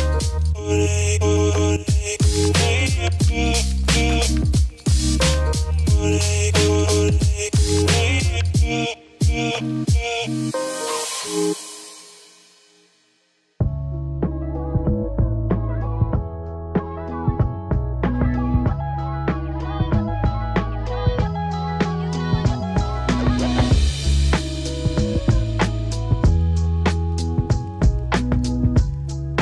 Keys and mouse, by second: 4.1 click, 5.4 click, 10.3 F3, 10.3 click, 10.6 click, 10.8 ctrl+z, 11.2 click, 11.5 ctrl+z, 11.6 click, 11.8 ctrl+z, 11.9 click, 12.5 click, 13.1 ctrl+z, 13.1 click, 13.4 click, 15.0 ctrl+z, 16.5-21.6 drag, 22.1 click, 23.0-23.5 middle drag, 23.8-24.2 middle drag, 24.6-25.1 middle drag, 25.7 click, 26.1-26.6 middle drag, 27.5 click, 28.4 middle click.